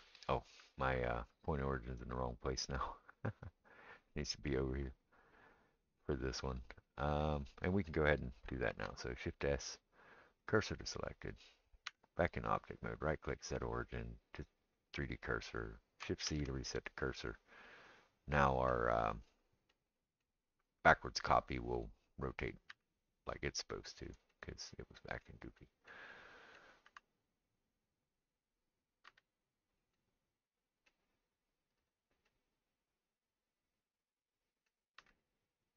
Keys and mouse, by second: 3.4 click, 8.7 shift+s, 11.9 Tab, 12.5-35.7 right drag, 16.3 shift+c, 17.9 click, 22.8 r, 24.4-25.0 middle drag, 26.9 r, 29.1 g, 31.8 click, 33.6-34.2 middle drag, 35.0 g.